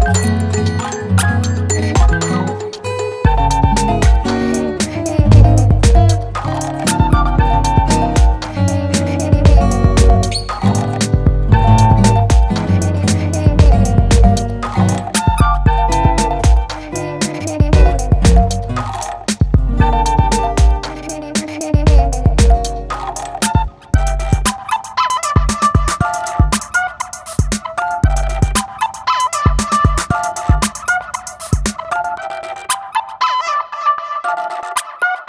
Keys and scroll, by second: 0.7 super+t, 8.6 super+space, 8.8 super+t, 9.3 alt+shift+super+t, 14.7 b, 15.8 [, 17.1 x, 18.4 0, 18.9 [, 20.9 [, 22.7 [, 25.0 ], 26.3 ], 29.5 [, 33.5 ], 34.9 [.